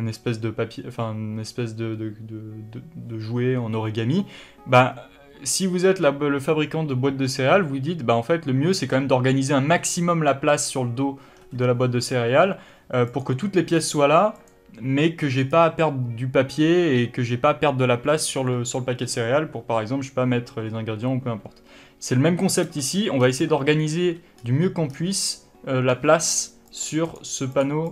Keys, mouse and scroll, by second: 13.4 click, 14.1 click, 14.7 click, 15.7 click, 23.5 click, 24.7 scroll up 1, 25.2-26.5 scroll down 1, 26.6 click, 27.0 click, 27.4 click, 27.8 click.